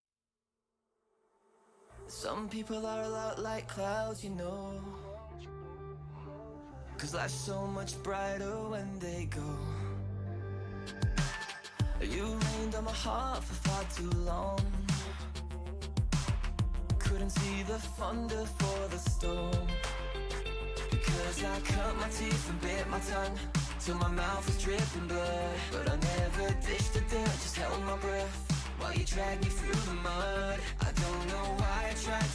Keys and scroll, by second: 3.4 ctrl+c, 4.2 ctrl+v, 19.5 s, 20.8 Return.